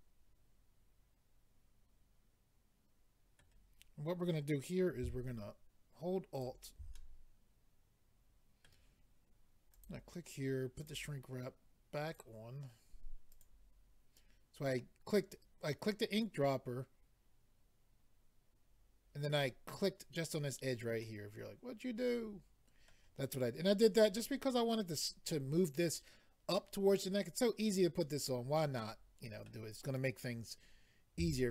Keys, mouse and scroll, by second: 6.3 alt+click, 6.9 middle click, 9.7 click, 10.8 click, 12.1 click, 13.3 click, 21.0 middle click, 28.8 middle click.